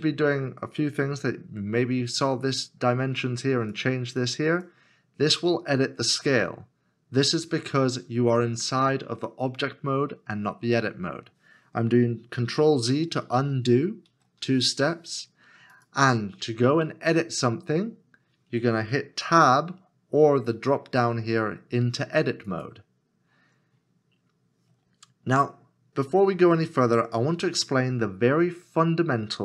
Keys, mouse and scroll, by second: 13.3 ctrl+z, 14.1 ctrl+z.